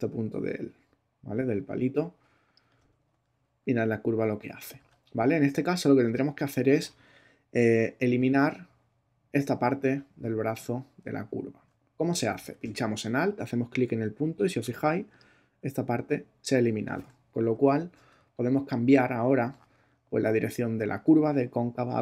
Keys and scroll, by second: 4.7 super+z, 18.1 super+space.